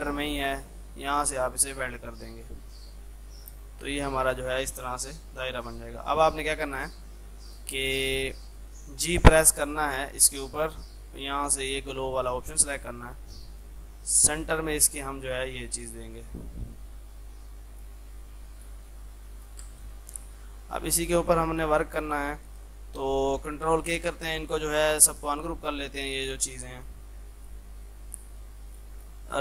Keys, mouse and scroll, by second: 1.4 click, 3.2 F3, 3.7-6.6 drag, 6.7 F3, 7.1-9.2 drag, 9.2 g, 9.7-19.7 drag, 19.7 space, 20.0 F3, 20.4-24.9 drag, 24.9 ctrl+k, 25.4-29.4 drag.